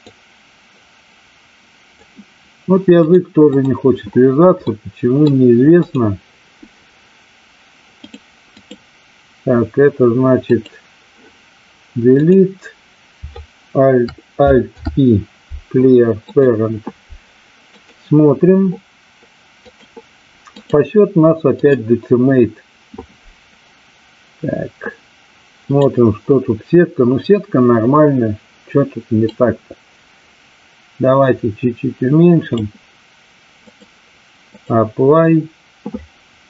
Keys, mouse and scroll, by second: 3.1-3.5 drag, 4.5-5.3 middle drag, 5.8 click, 7.9 click, 12.2 click, 14.5 alt+p, 17.7 click, 19.5 click, 20.7-21.8 drag, 25.7 click, 29.3-32.5 drag, 33.7-34.8 drag.